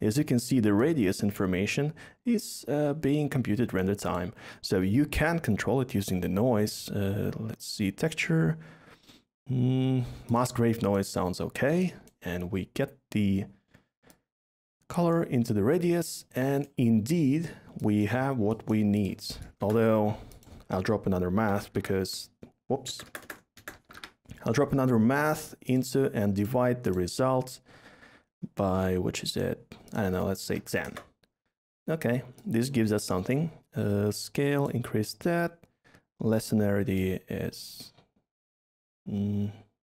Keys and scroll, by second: 4.9 a, 19.6 a, 21.3-21.7 typing, 22.8-24.2 typing, 29.0 typing, 30.5 typing, 30.8 Return.